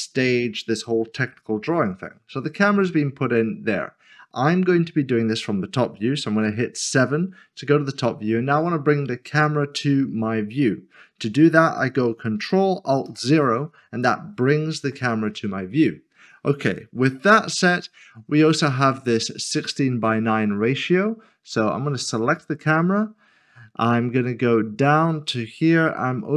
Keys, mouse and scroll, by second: 2.8 middle click, 6.8 KP_7, 13.1 ctrl+alt+KP_0, 22.2 click, 24.8 click.